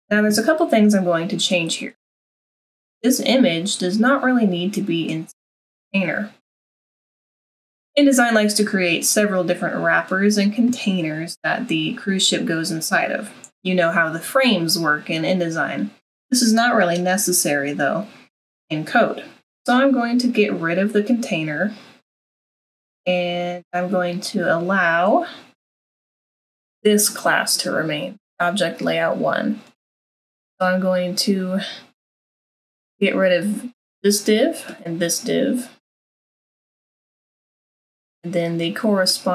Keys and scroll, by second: 36.6 BackSpace, 37.6 BackSpace.